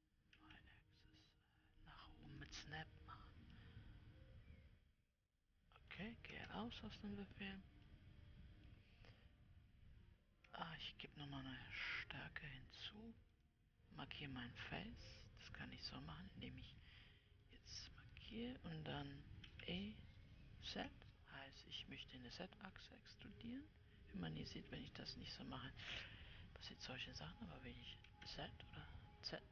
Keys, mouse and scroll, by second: 4.1-6.9 middle drag, 6.9 Tab, 8.3-10.9 middle drag, 10.9 Tab, 13.8-16.4 drag, 16.4-18.0 middle drag, 18.0-20.0 drag, 20.0 e.